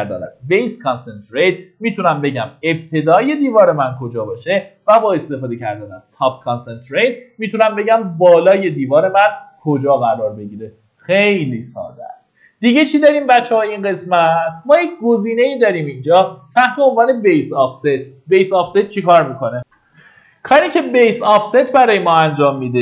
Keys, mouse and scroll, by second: 15.5-16.1 scroll up 1, 20.0 F9.